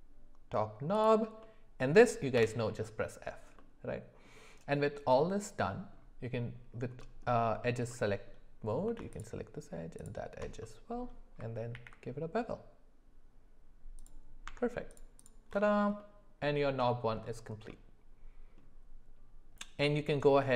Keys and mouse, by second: 1.4 middle click, 3.0 f, 3.6 middle click, 5.6 middle click, 7.0 middle click, 7.9 middle click, 10.6 middle click, 11.7 ctrl+b, 14.4 Tab, 16.0 middle click, 16.8 shift+middle click.